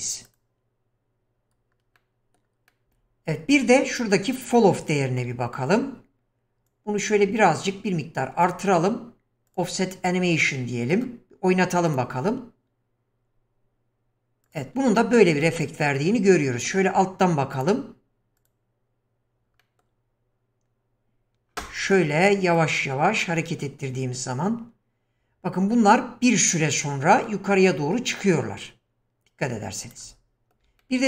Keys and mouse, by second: 2.0-2.4 middle drag, 2.7 middle drag, 4.7-5.3 shift+middle drag, 6.7-8.5 drag, 9.5 click, 10.4-10.9 middle drag, 14.5 click, 15.0 shift+middle click, 15.6-16.7 middle drag, 17.5 click, 18.4 click, 19.6 middle click, 22.6-30.0 drag, 30.5 shift+click, 30.8-31.0 middle drag.